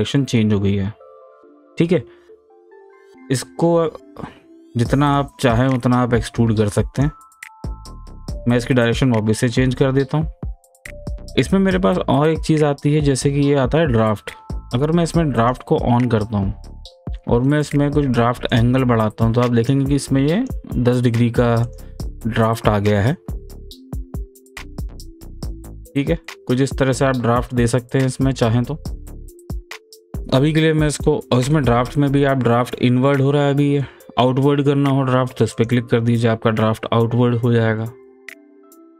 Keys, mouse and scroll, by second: 0.2-2.7 middle drag, 2.7-3.1 scroll up 1, 3.1 scroll down 1, 5.1-6.8 drag, 9.8-13.2 middle drag, 15.4 click, 18.5-20.3 drag, 20.4 click, 21.6 click, 22.9-31.5 middle drag, 31.5-35.5 middle drag, 35.5 click, 36.2-38.9 middle drag.